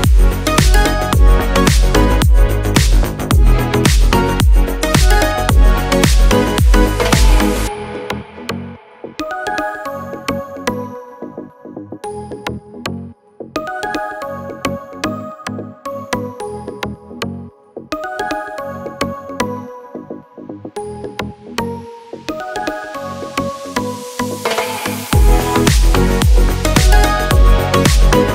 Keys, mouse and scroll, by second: 0.9 click, 7.4-11.9 drag, 19.0-21.3 drag, 25.1 click.